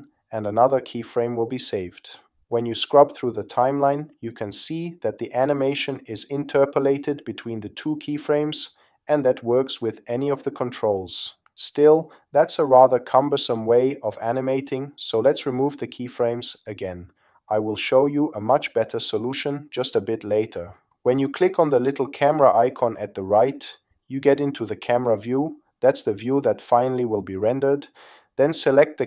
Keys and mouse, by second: 2.2-2.6 drag, 5.4-7.3 drag, 8.1 space, 12.3 a, 14.1 x, 19.6 click, 26.5 g.